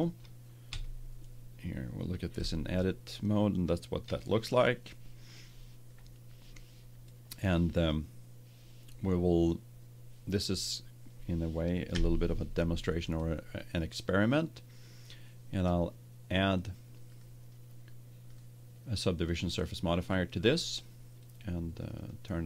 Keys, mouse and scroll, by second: 0.6 Tab, 11.9 KP_1, 17.0-20.1 drag, 21.7-22.4 drag.